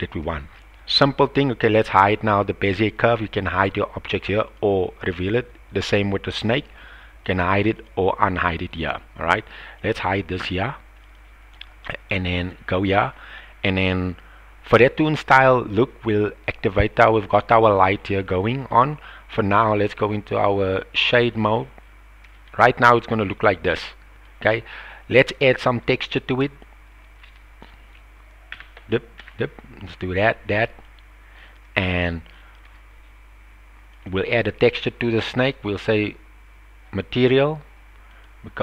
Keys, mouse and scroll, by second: 0.5-0.9 shift+middle drag, 3.4 click, 4.5 click, 5.8 click, 7.2 click, 7.7 click, 9.7 click, 11.0 click, 12.5 click, 13.1 middle click, 14.7 click, 17.3 click, 18.4 middle click, 20.0 click, 21.3 click, 22.3-22.7 shift+middle drag, 22.7 shift+click, 23.3-24.2 middle drag, 26.6 click, 28.5 n, 29.2 n, 31.0 click, 32.3-32.6 shift+middle drag, 34.0 click, 35.4 click, 38.1-38.6 drag.